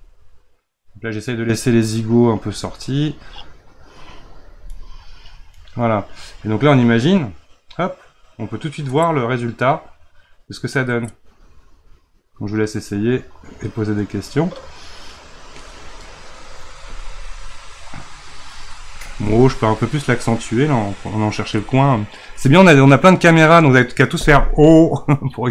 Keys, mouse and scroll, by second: 0.0-2.3 middle drag, 2.3-4.7 drag, 4.7-7.2 middle drag, 7.2-10.4 drag, 20.5 click.